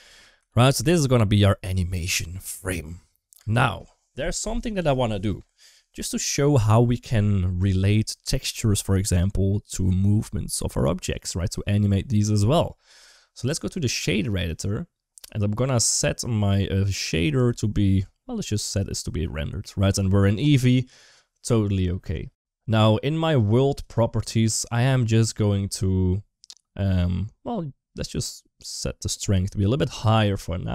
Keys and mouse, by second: 0.7 ctrl+shift+s, 0.8-1.2 shift+middle drag, 3.2 space, 13.6-14.4 drag, 18.6 click, 28.0 click.